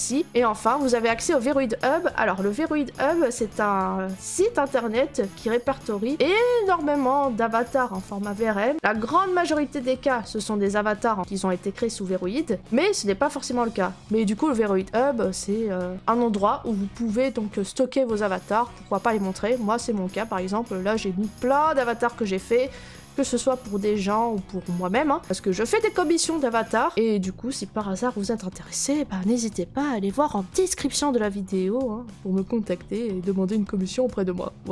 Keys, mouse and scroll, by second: 1.3 click, 6.7 click, 10.4 click, 11.2 click, 19.4-19.9 scroll, 21.0 scroll, 21.6-22.2 scroll, 24.0 scroll, 24.0 middle click, 24.1 middle click, 24.1 middle click, 25.0 middle click, 25.1 middle click, 25.9 scroll, 25.9 middle click, 26.0 middle click, 26.0 middle click, 26.4 middle click, 26.5 middle click, 26.5 middle click, 27.3-28.2 scroll, 31.4 middle click, 31.5 middle click.